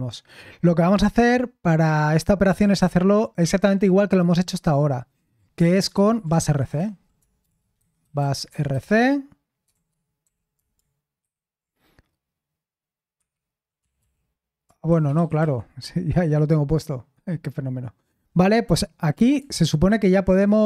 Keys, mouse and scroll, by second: 2.2-3.3 typing, 5.6-10.7 typing, 11.2 ctrl+v, 13.1 Escape, 13.5-15.9 typing, 16.1 Return, 19.3 super+l.